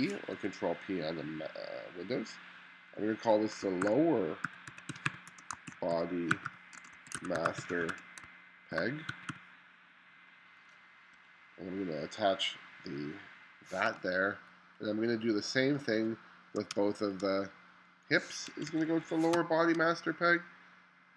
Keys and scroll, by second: 0.4 2, 3.8-9.8 typing, 11.2 1, 14.0 space, 16.8 space, 18.6 1, 19.4 space.